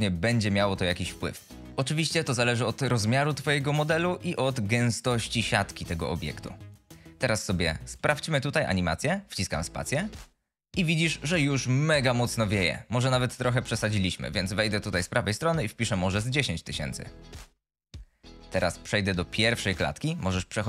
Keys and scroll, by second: 7.3 F22, 9.8 space, 15.8 End.